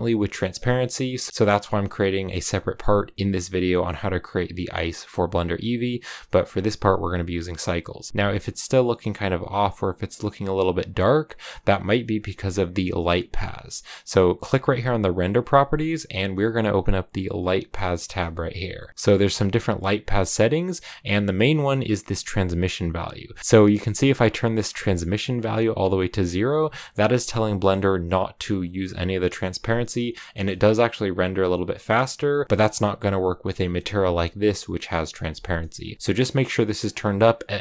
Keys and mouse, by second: 6.4-7.5 drag, 15.7 click, 17.3 click, 22.9-24.1 drag, 30.0 shift+middle click, 36.9 click, 37.4 click.